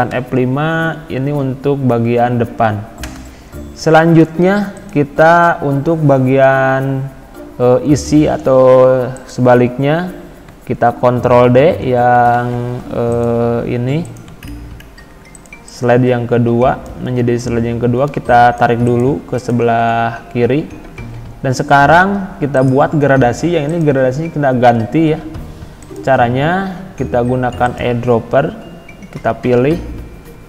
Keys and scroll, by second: 0.1 F5, 3.2 Escape, 12.3 ctrl+d.